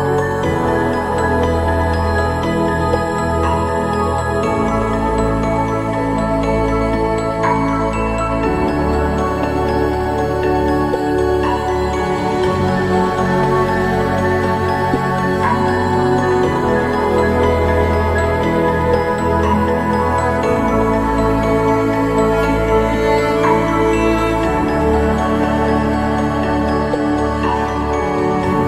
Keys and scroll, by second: 9.1 ctrl+=, 23.4 ctrl+=, 25.6 ctrl+-, 28.4 ctrl+=.